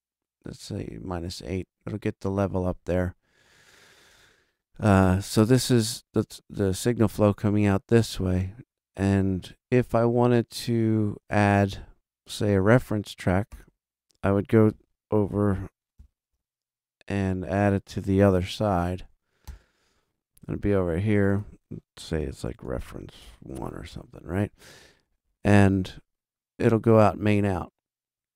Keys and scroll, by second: 15.9 shift+super+n, 18.4 super+Right, 19.4 super+Return, 22.2-23.4 typing, 23.9 Return.